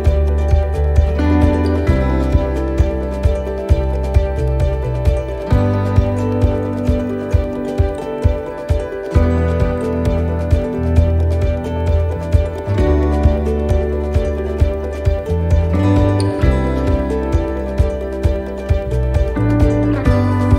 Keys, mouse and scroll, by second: 1.2 shift+right click, 2.5 shift+right click, 4.6 middle click, 5.8 shift+right click, 7.1 shift+right click, 7.5 shift+right click, 8.5 shift+right click, 8.6 middle click, 9.9 shift+right click, 11.2 shift+right click, 11.6 shift+right click, 12.8 shift+right click, 13.0 middle click, 15.5 middle click, 18.1 click.